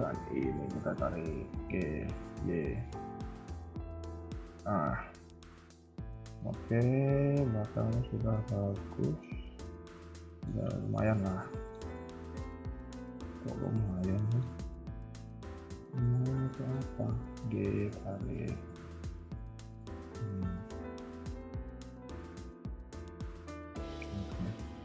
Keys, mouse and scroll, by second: 0.4 click, 1.5 g, 4.5 scroll down 3, 4.7 Tab, 5.0 middle click, 5.8-6.2 scroll down 2, 6.1 middle click, 9.7 Tab, 10.2 shift+middle click, 10.7 KP_3, 11.1 scroll up 2, 11.5 shift+middle click, 11.9 middle click, 12.5 KP_1, 12.7 KP_3, 13.0 scroll down 1, 13.2 middle click, 15.1 click, 16.1 ctrl+click, 16.5 middle click, 16.9 g, 18.5 middle click, 19.3 Tab, 19.5 KP_3, 19.8 middle click, 22.0 KP_1, 22.2 KP_3, 22.9 scroll down 2, 23.2 shift+middle click, 23.4 scroll up 1, 23.5 Tab, 24.4 alt+click.